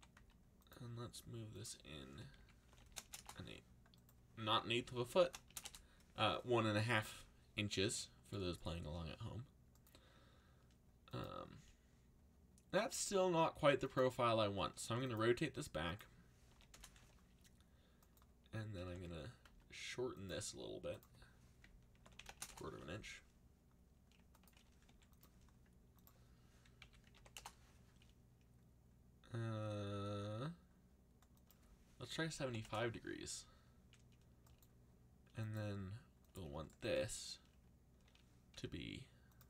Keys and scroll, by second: 0.0-0.6 typing, 2.1-3.1 typing, 3.1 Return, 4.5-5.9 typing, 14.8 r, 16.2-17.1 typing, 18.5-19.4 typing, 21.7-22.8 typing, 24.8 r, 26.5-27.6 typing, 31.9-33.0 typing, 38.5 r.